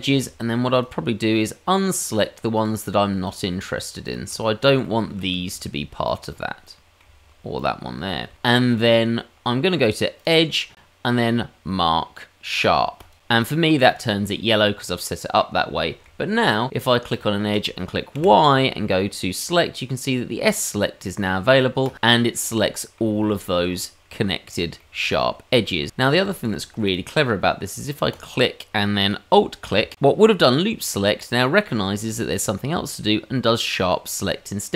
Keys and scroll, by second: 18.1 y.